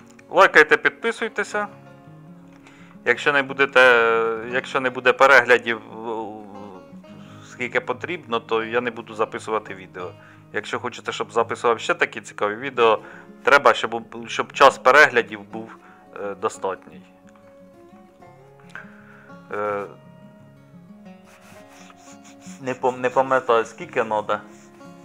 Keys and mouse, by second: 0.0 middle click, 1.2 middle click, 1.5 middle click, 2.5 middle click, 3.5 middle click, 4.9-6.2 middle drag, 7.1-8.6 middle drag.